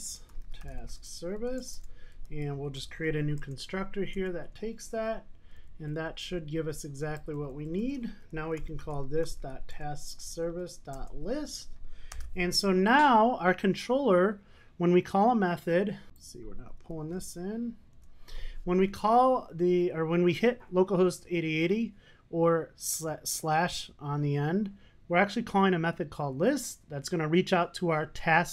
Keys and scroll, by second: 5.6 super+n, 9.8 Return, 12.2 Return, 15.4 super+s, 17.1 alt+Return.